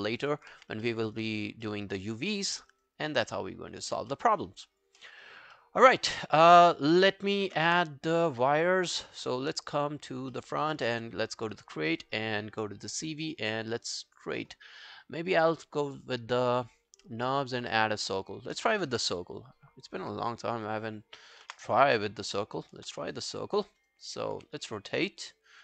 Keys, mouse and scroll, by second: 0.0 alt+scroll down 1, 0.1 alt+right click, 0.3 alt+click, 0.6 q, 0.9 alt+middle click, 1.1 alt+right click, 1.3 alt+click, 1.7 alt+middle click, 1.9 alt+right click, 2.1 alt+click, 2.5 alt+middle click, 2.8 alt+right click, 3.0 alt+click, 3.3 alt+middle click, 3.7-4.1 alt+scroll up 2, 4.1 alt+middle click, 4.4 alt+scroll down 1, 4.6 alt+click, 5.0 alt+middle click, 5.2 alt+right click, 5.6 alt+middle click, 5.9 alt+scroll down 1, 6.1 alt+click, 6.9 alt+middle click, 7.2 alt+scroll down 1, 7.4 alt+click, 7.7 space, 9.1 space, 10.0 scroll down 1, 10.3 alt+middle click, 10.6 alt+right click, 11.0 w, 18.2-20.0 scroll down 1, 20.0 r, 21.5 space, 22.8 space, 23.5 alt+click, 23.8 alt+right click, 24.4 e.